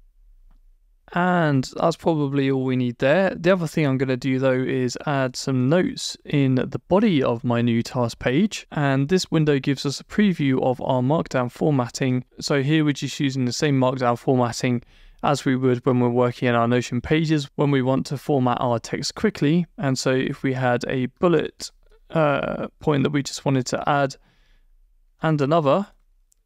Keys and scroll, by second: 11.9 Return, 22.4 BackSpace, 23.6 Return, 24.4 shift+Return.